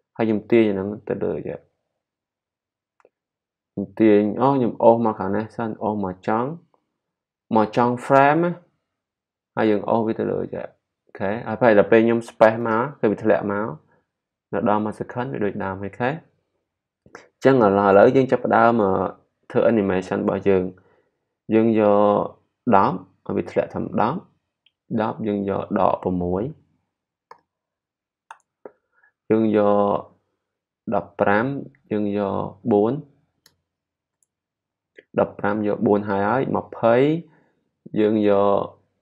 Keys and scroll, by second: 27.0-27.7 typing, 33.4 4.